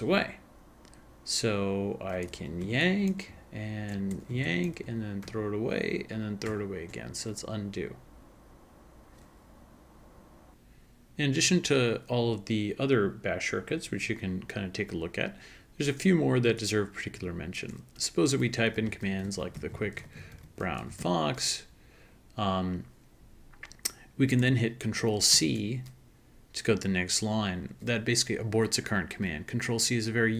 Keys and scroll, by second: 2.6 ctrl+y, 4.3 ctrl+y, 5.2 ctrl+shift+-, 6.6 ctrl+shift+-, 10.5 ctrl+a, 10.5 ctrl+k, 18.3-21.5 typing, 25.3 ctrl+c.